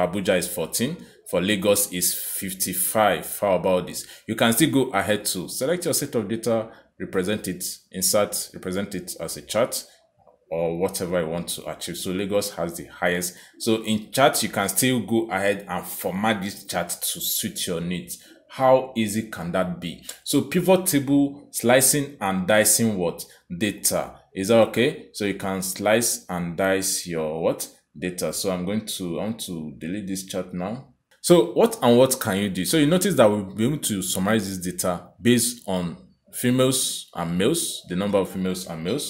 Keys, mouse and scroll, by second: 1.1 click, 2.0 click, 4.8 click, 8.0 click, 9.4 click, 10.5 click, 14.1 click, 18.8 click, 21.7 click, 22.2 Escape, 23.4 click, 24.1 Escape, 24.9 click, 26.9 right click, 31.0 click.